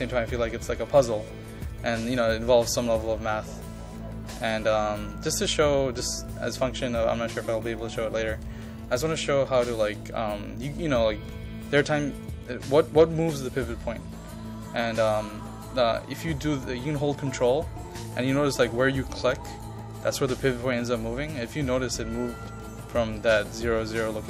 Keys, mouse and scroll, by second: 16.2-18.0 ctrl+drag, 18.8 ctrl+click, 19.6 ctrl+click, 20.0 ctrl+click, 20.4 ctrl+click, 20.9 ctrl+click, 21.2 ctrl+click, 21.7 ctrl+click.